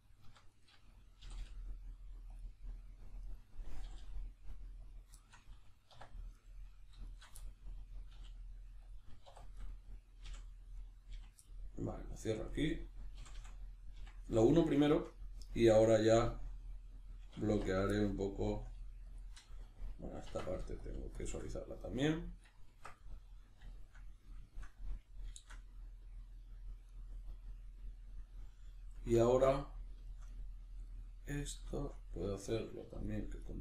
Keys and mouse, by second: 0.5 right click, 1.2 g, 2.4 click, 3.3 right click, 3.9 g, 4.9 click, 5.2-6.3 shift+middle drag, 5.9 1, 6.3 right click, 7.1 shift+right click, 7.4-8.9 middle drag, 8.1 e, 8.9 click, 9.3 2, 9.6 right click, 10.3 f, 10.7 right click, 11.1 f, 11.5-12.5 middle drag, 12.5 right click, 13.2 f, 14.3-17.7 middle drag, 17.5 1, 17.7 right click, 17.9-20.8 middle drag, 18.8 g, 19.2 click, 20.3 Tab, 20.8 shift+click, 21.5 middle click, 22.7 b, 23.0-26.8 middle drag, 26.8 right click, 27.2-33.1 middle drag, 32.9 2, 33.1 right click, 33.4 right click.